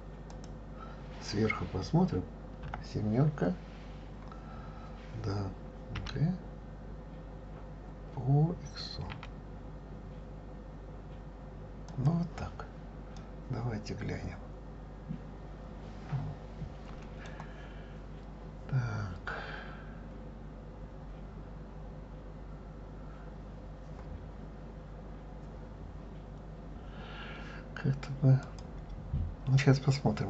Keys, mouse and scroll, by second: 0.3 click, 2.6 KP_7, 3.7 scroll down 1, 6.0 g, 13.1-16.2 middle drag, 28.4 click.